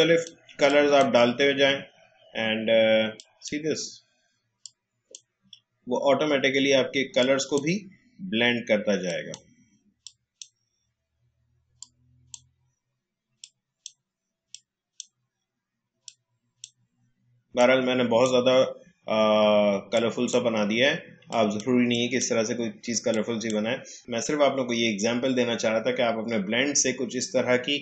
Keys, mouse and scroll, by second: 3.1-24.0 drag.